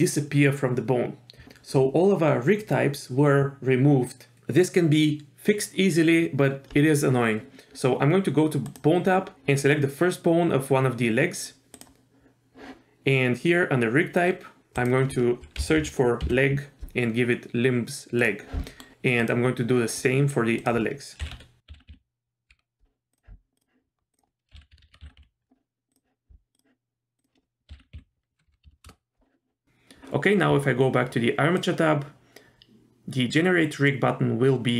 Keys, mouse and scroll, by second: 8.6 click, 11.7 click, 14.2-14.8 scroll down 1, 14.8-18.3 drag, 18.7 middle click, 19.2 click, 20.6-23.2 drag, 23.6 click, 24.1-26.0 drag, 24.8 BackSpace, 24.9 BackSpace, 26.5 click, 27.2-28.8 drag, 31.6 click.